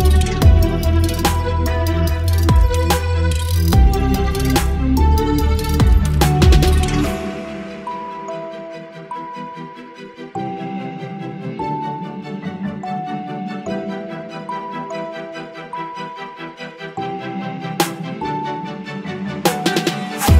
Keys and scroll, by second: 17.5 Delete.